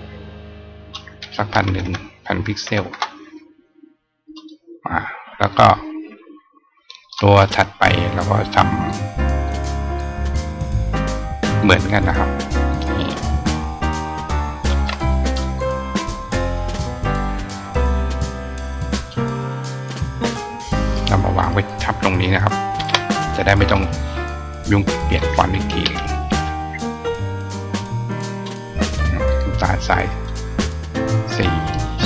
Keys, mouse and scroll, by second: 4.1 click, 5.3-7.0 drag, 8.8 click, 10.5-11.1 scroll down 1, 11.4-12.6 drag, 17.5 click, 18.9 drag, 19.9-21.2 drag, 24.8 click, 28.2 click, 31.0 click, 31.6 click.